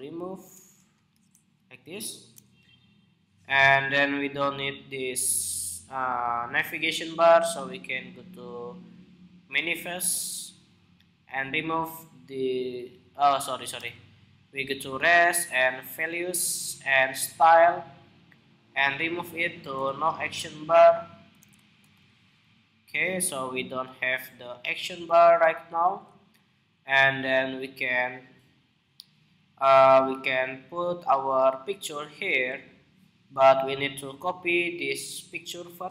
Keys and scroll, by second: 13.3 super+w.